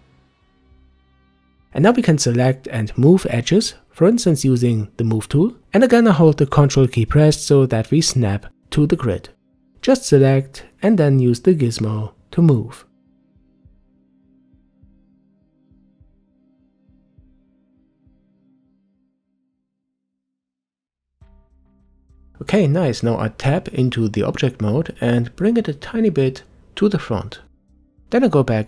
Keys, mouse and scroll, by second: 4.3-5.7 drag, 8.6 click, 10.9 ctrl+click, 14.6-16.5 drag, 19.9-20.4 scroll down 1, 20.4-21.4 middle drag, 21.4 Tab, 22.7 middle click, 23.2 Tab, 25.0-27.8 drag, 27.8-28.6 middle drag.